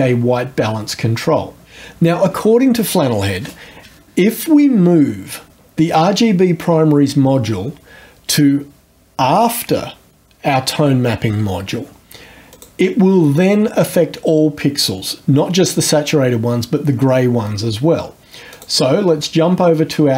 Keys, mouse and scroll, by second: 12.5 click, 18.5 click.